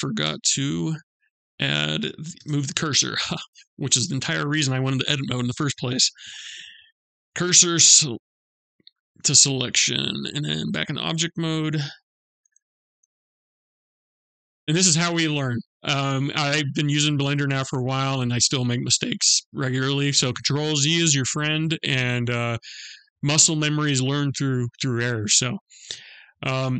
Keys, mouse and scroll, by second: 1.0 click, 1.8 Tab, 2.6 click, 5.6 shift+s, 10.2 Tab, 11.1 shift+a.